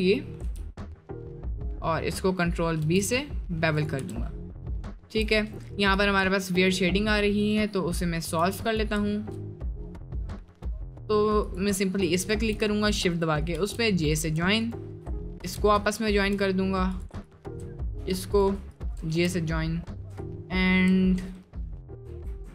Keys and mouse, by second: 0.3 middle click, 0.5 g, 1.9 middle click, 3.0 ctrl+b, 4.0 Tab, 4.3 middle click, 4.8 middle click, 5.5 Tab, 5.8 shift+middle click, 6.1 1, 7.4 click, 8.2 shift+middle click, 9.1 shift+middle click, 11.4 right click, 13.6 j, 14.1 right click, 14.7-15.0 shift+drag, 15.4 j, 15.9-16.2 shift+drag, 17.0 click, 17.2 shift+click, 18.0 j, 18.3 click, 19.1 j, 19.4-20.1 shift+middle drag, 22.0 Tab.